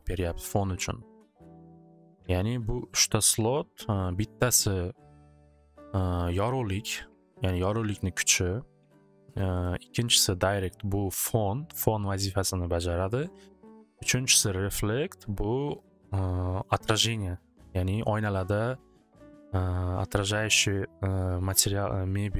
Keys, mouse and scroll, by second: 2.7 click, 3.1 click, 3.5 click, 10.0-13.3 drag, 15.0-18.8 drag.